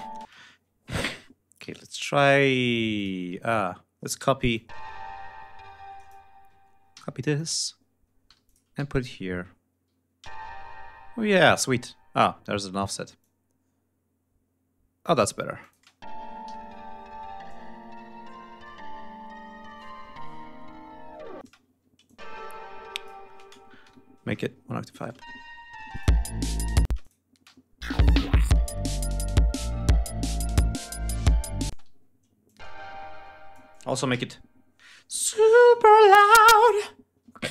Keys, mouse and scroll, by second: 0.2 ctrl+space, 1.5 g, 1.8 click, 2.9 click, 4.1 e, 4.5-6.2 drag, 6.9 ctrl+c, 7.3 ctrl+click, 8.2 g, 8.4 click, 9.1 e, 10.1 ctrl+v, 11.2 click, 13.1-15.2 drag, 15.5 click, 15.7 space, 16.4 g, 16.7 ctrl+scroll down 2, 16.9 ctrl+scroll up 2, 21.3 space, 21.7 e, 22.0 click, 23.8 alt+shift+Up, 24.8 click, 25.1 space, 25.8 click, 26.2 ctrl+scroll down 2, 26.8 ctrl+space, 26.9 ctrl+click, 27.4 ctrl+scroll up 2, 31.6 space, 31.9 e, 32.4-33.6 drag, 34.2 c.